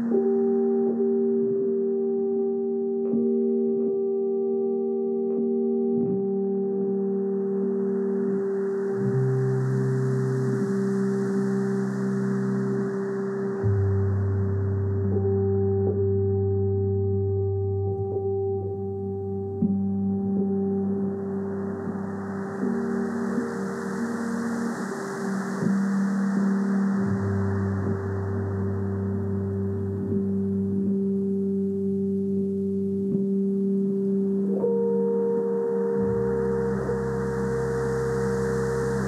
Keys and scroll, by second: 4.6-5.9 typing, 7.0 [, 8.5 space, 11.1 [, 12.9-13.9 typing, 15.4 x, 15.7 space, 16.5 x, 18.8 space, 20.1 x, 21.3 2, 22.9-24.1 typing, 25.8 space, 27.8-31.6 typing, 33.5 [, 34.2 [, 36.2 space.